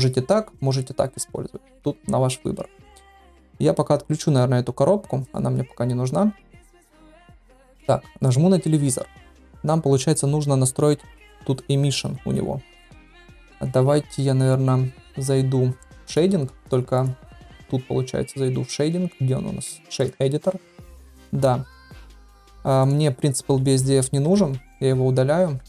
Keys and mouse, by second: 5.2 click, 8.1 drag, 16.1 click, 16.9-20.0 drag, 20.8 shift+middle click, 22.1 shift+middle click, 24.2 Delete.